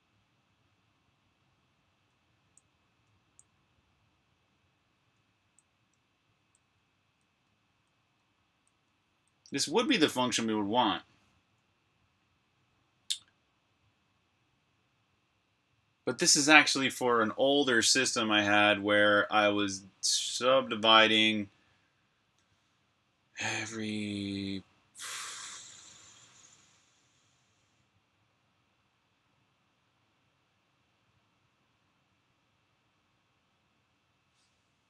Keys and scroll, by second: 2.0-6.9 typing, 9.5 typing, 10.9 k.